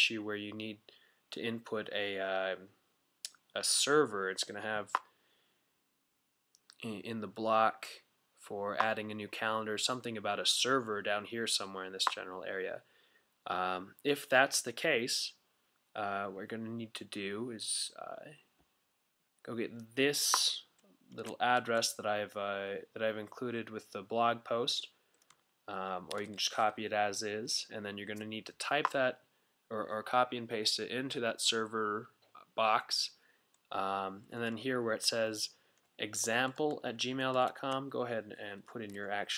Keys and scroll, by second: 21.2 super+a, 26.1 super+c, 34.2 fn+Left, 34.4 fn+Left, 34.5 fn+Left, 34.7 fn+Left, 34.8 fn+Left, 36.2 shift+fn+Left, 36.7 Left, 36.9 Left, 37.0 Left.